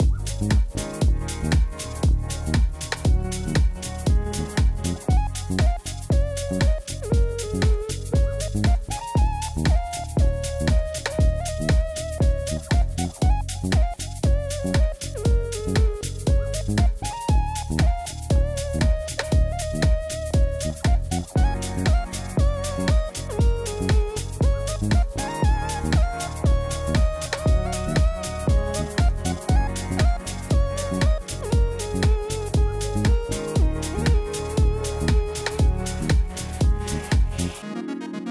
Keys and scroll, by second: 2.9 shift+a, 4.2 i, 4.4 m, 4.6 a, 10.0 shift+a, 11.0 m, 11.1 i, 11.4 x.